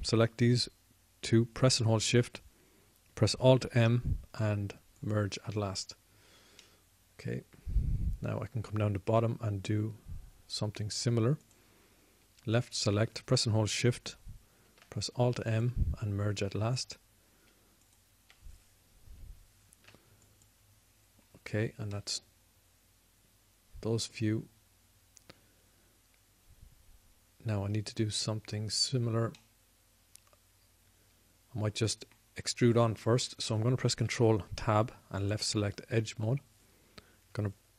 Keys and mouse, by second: 5.2 alt+m, 7.0 alt+m, 8.4-17.6 drag, 16.5 alt+m, 17.6 alt+m, 18.7-22.4 drag, 21.5 alt+m, 22.4 alt+m, 23.9 middle click, 24.1 middle click, 30.6-32.6 middle drag, 32.7 middle click, 33.0 middle click, 35.9 ctrl+Tab, 37.3 ctrl+Tab.